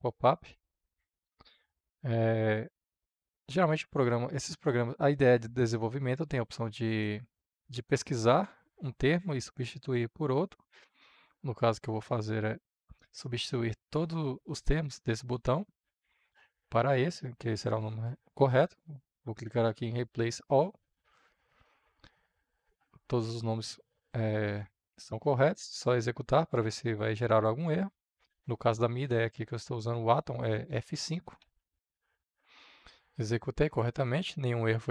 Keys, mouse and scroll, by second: 1.0-24.9 drag, 24.9-27.2 middle drag, 27.2-31.3 drag, 31.3 F5, 33.6-34.9 drag.